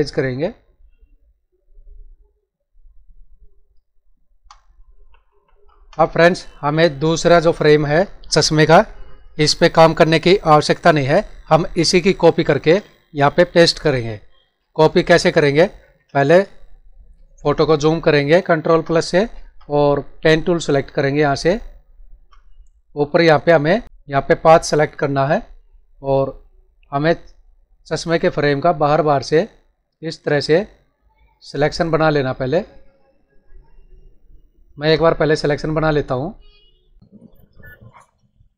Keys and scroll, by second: 4.9 ctrl+-, 15.3 ctrl+=, 16.4 space.